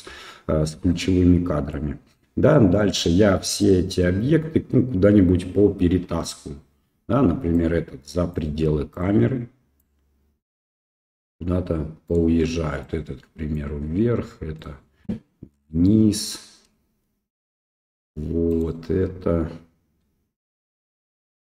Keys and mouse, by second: 0.9-1.7 middle drag, 2.5-2.8 middle drag, 3.6 click, 6.0 KP_0, 7.5 click, 8.9 click, 9.8 click, 12.1 right click, 12.8 click, 14.6-15.8 right drag, 15.8-17.5 drag, 18.5 right click.